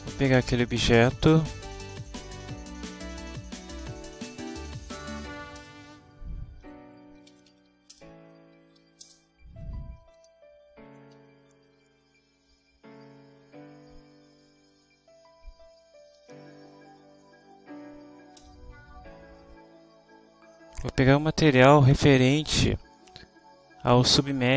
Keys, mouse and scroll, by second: 0.0-2.6 typing, 2.8 Return, 4.6 Down, 5.6 Return, 6.0 End, 7.1-8.4 typing, 8.9 Down, 9.1 Return, 9.6 ., 11.2 u, 11.7 r, 13.8 Down, 18.5 Return.